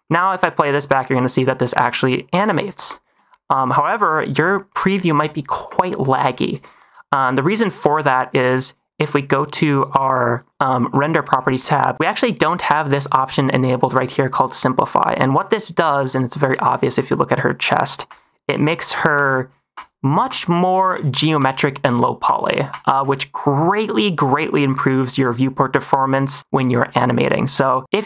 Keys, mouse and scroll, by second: 0.0 middle click, 0.6 -, 2.8 shift+middle click, 4.1 middle click, 4.9 shift+middle drag, 5.6 space, 6.7 shift+middle drag, 10.8 click, 12.3 middle click, 12.6 middle click, 15.5 shift+middle click, 16.4 middle click, 18.0 click, 18.6 click, 19.1 click, 19.7 click, 20.2 click, 20.9 click, 21.3 click, 21.8 click, 22.2 click, 22.6 click, 26.8 shift+middle drag, 27.1 shift+middle drag, 27.9 click.